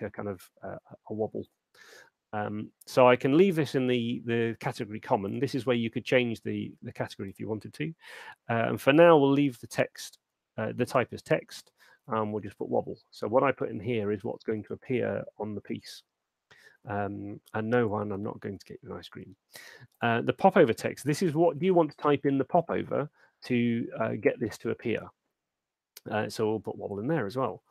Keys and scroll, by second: 11.6-12.8 typing, 20.9-21.9 typing.